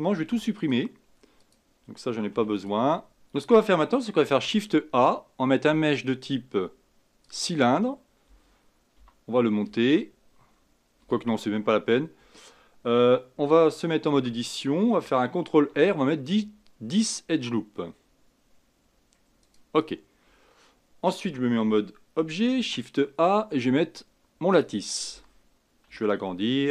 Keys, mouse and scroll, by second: 0.3 x, 1.4 click, 2.3 x, 4.2 shift+a, 8.9 g, 14.2 Tab, 15.5 ctrl+r, 21.2 Tab, 22.5 shift+a, 25.9 s.